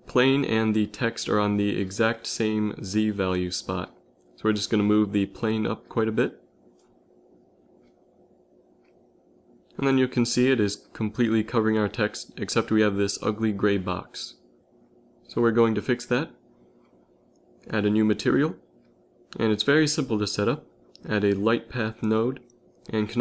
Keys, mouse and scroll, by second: 1.0 KP_3, 4.4 g, 5.2-7.9 middle drag, 8.7 KP_7, 9.8 shift+z, 14.1 z, 14.3 z, 17.6 click, 19.7 shift+a.